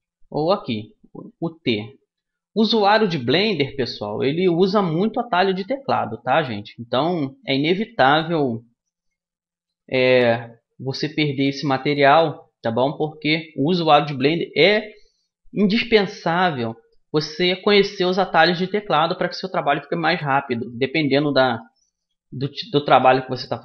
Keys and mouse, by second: 0.0 n, 0.0 t, 1.2 t, 2.3 t, 5.4 middle click, 5.8 middle click, 6.8-9.6 middle drag, 10.6-11.6 middle drag, 16.0-17.4 middle drag, 19.9-21.6 middle drag, 21.8-23.5 middle drag.